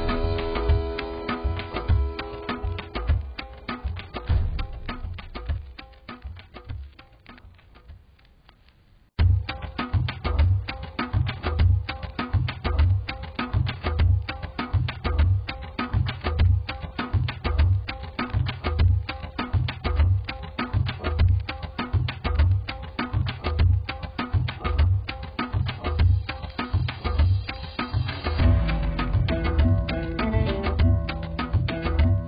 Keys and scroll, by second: 3.9 ctrl+0, 18.1 z.